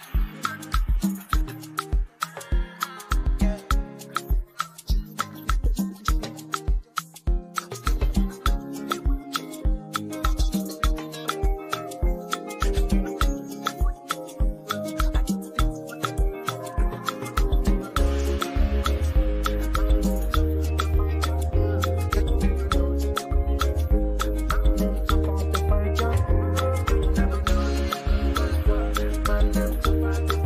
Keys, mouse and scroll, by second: 0.0-3.3 typing, 4.6 click, 8.6 click, 13.1-14.3 scroll down 1, 14.3 click, 16.9 click, 25.0-30.4 drag.